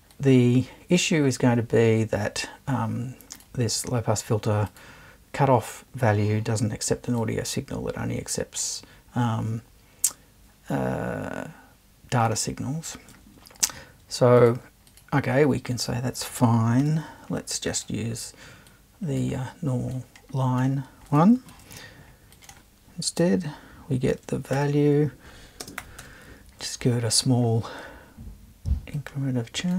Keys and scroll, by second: 16.8 BackSpace, 21.5 super+2, 24.1-26.5 typing.